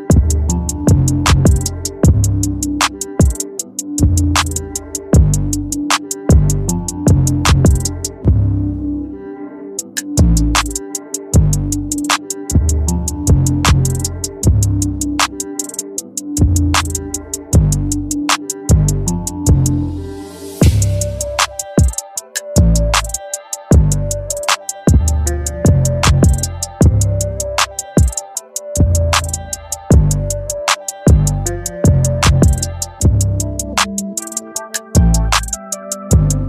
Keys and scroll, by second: 11.7 ctrl+j, 15.1 ctrl+t, 26.1 Return.